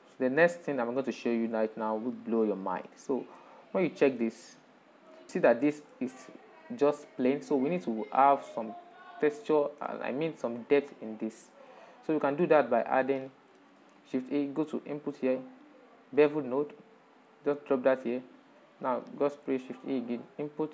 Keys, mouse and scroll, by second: 0.9 click, 1.6-4.7 shift+middle drag, 4.7 ctrl+shift+click, 5.7-6.7 middle drag, 6.7 scroll down 2, 7.2-14.1 middle drag, 14.1 shift+a, 16.7 shift+a, 18.3-19.4 drag, 19.9 shift+a.